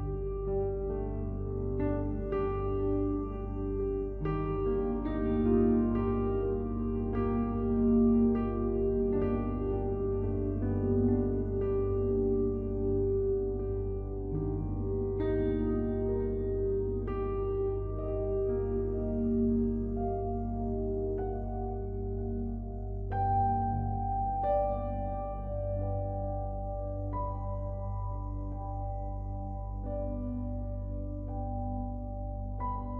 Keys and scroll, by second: 2.1 ctrl+t.